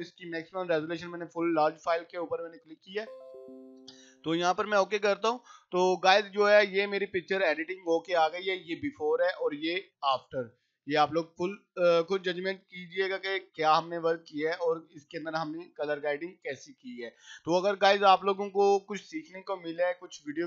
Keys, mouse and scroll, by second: 2.1 click, 8.4-18.0 drag, 18.0-19.9 drag, 20.1 scroll up 1.